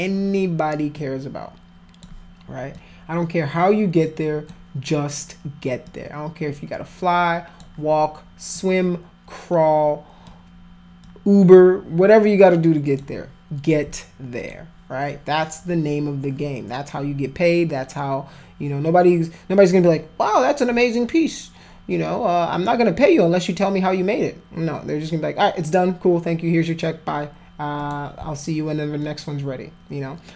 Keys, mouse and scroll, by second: 2.7-4.5 alt+drag, 5.9-7.6 alt+drag, 8.5-10.3 alt+drag, 11.0-13.0 alt+drag, 14.4 click, 27.8 click, 29.0-30.3 alt+drag.